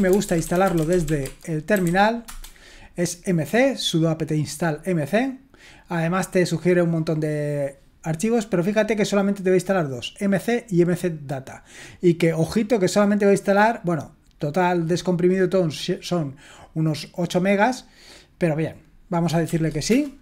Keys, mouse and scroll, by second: 0.0-2.3 typing, 9.3-11.3 drag, 13.5-14.6 drag, 14.9-18.0 drag, 18.3 click, 19.5-19.9 typing.